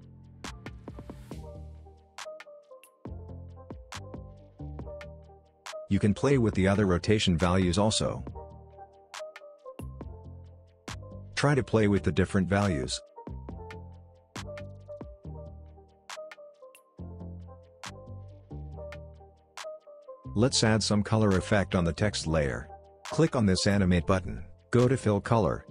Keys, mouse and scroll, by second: 0.4 click, 1.7 space, 3.4-4.0 click, 3.9 space, 5.7-6.7 drag, 10.9-13.4 drag, 13.5 ctrl+z, 14.1-17.2 drag, 17.3 ctrl+z, 18.5-20.4 drag.